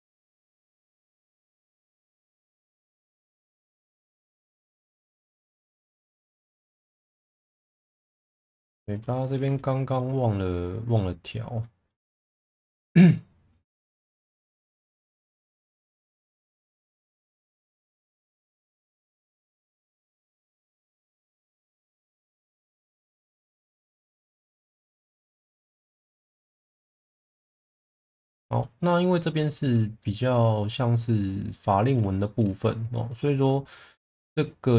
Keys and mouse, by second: 1.3 click, 1.8 click, 3.4 click, 5.7 click, 7.6 click, 9.2 shift+middle drag, 9.9 click, 12.9 click, 15.7 click, 17.3 shift+middle click, 18.1 click, 19.0 click, 20.7 click, 24.4 shift+middle click, 24.8 shift+middle click, 26.6 click, 29.4 shift+middle click, 30.0 click, 30.6 click, 32.2 shift+middle click, 34.1 click.